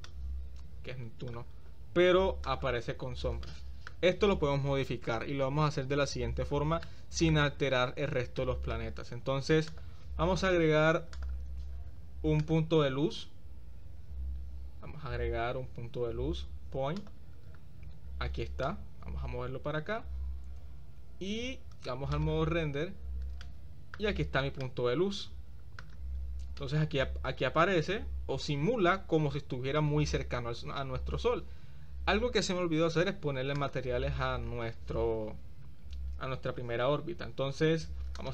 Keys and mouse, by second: 0.0-1.3 drag, 2.5 click, 3.5-3.9 middle drag, 6.8-7.4 middle drag, 7.2 click, 7.8 middle click, 8.4-8.8 middle drag, 9.7 click, 12.6-17.1 drag, 18.6-20.0 drag, 22.3 click, 23.4-23.8 middle drag, 24.7-25.8 shift+middle drag, 26.7-29.8 middle drag.